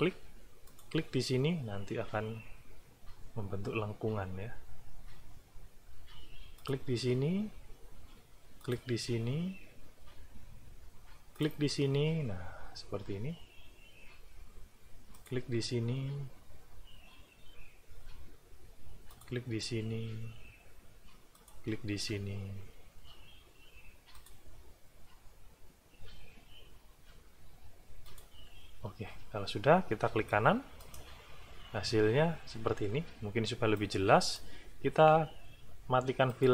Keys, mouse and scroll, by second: 0.6 click, 6.6 click, 8.6 click, 11.3 click, 15.1 click, 19.1 click, 21.3 click, 24.1 click, 28.0 click, 30.8 right click, 33.7 click, 36.3 click.